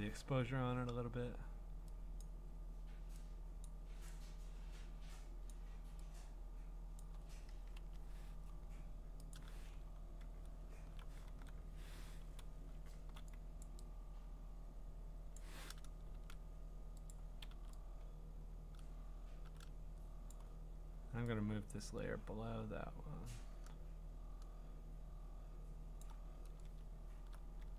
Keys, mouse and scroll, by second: 3.7 click, 5.5 click, 7.0 click, 7.6 Return, 9.3 click, 9.9-11.3 scroll, 11.3 e, 12.4-13.1 [, 13.6 click, 15.3 click, 16.1 ctrl+z, 17.1 click, 17.5 v, 20.3 click, 26.0 click.